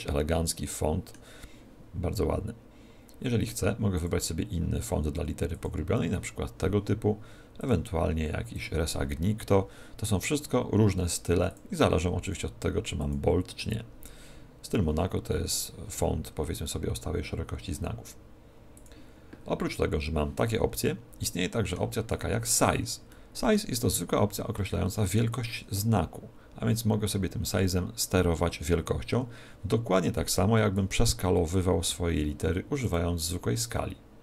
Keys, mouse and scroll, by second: 3.9 click, 7.5 click, 11.4 click, 18.7 click, 20.8 middle click, 22.0 shift+middle click, 23.0 middle click, 25.2 click, 31.7 n, 32.8 click.